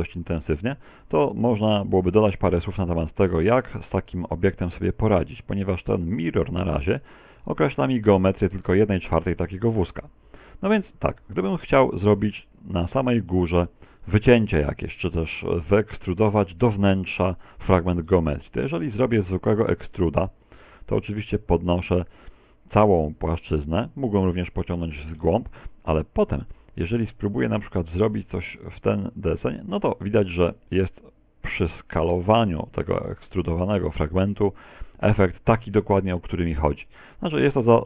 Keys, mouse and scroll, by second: 0.4 Tab, 0.7 middle click, 2.1 right click, 2.7 r, 5.2 middle click, 6.2 middle click, 7.1 right click, 7.4 Tab, 9.5 middle click, 11.1 middle click, 12.1 right click, 12.7 shift+right click, 13.4 right click, 14.1 shift+right click, 14.5 shift+middle click, 19.4 e, 29.8 click, 35.3 middle click, 36.6 middle click.